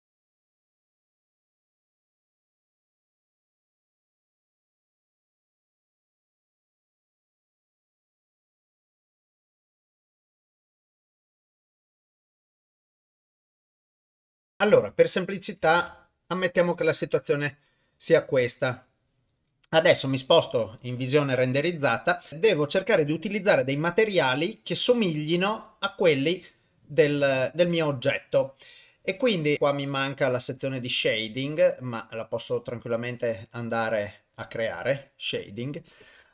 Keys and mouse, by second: 0.1 ctrl+KP_Add, 0.2 g, 0.4 KP_0, 0.8 click, 0.9 Tab, 1.1 Tab, 1.2 shift+middle click, 1.5 click, 1.5 3, 1.6 middle click, 1.8 ctrl+b, 2.2 middle click, 2.6 click, 2.7-4.2 typing, 3.5 middle click, 3.9 Tab, 4.0 shift+click, 4.6 shift+middle click, 5.3 Tab, 5.3-14.2 typing, 5.5 Tab, 5.7 middle click, 6.1 ctrl+middle click, 6.4 middle click, 6.8 middle click, 7.6 shift+middle click, 7.8 ctrl+middle click, 8.1 middle click, 8.7 Tab, 8.8 Tab, 8.8 ctrl+a, 9.1 Tab, 9.2 click, 9.2 shift+click, 9.6 shift+middle click, 9.8 middle click, 9.9 click, 9.9 Tab, 10.0 click, 10.1 Tab, 10.4 shift+middle click, 10.5 click, 10.7 click, 12.9 middle click, 13.3 middle click, 13.8 middle click, 14.1 middle click, 14.9 Tab, 15.8 ctrl+s, 17.7 click, 18.8 click, 20.8 click, 30.5 click.